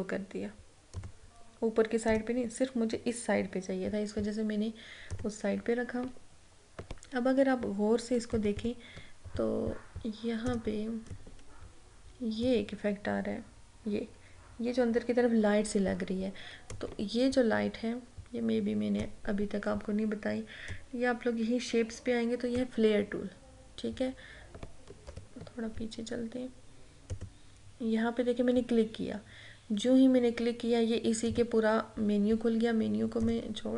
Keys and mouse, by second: 1.1 click, 5.2 click, 8.3 click, 8.4 ctrl+=, 10.6-14.9 drag, 16.8-25.2 drag, 25.2 ctrl+-, 27.2 click, 31.4-33.7 drag.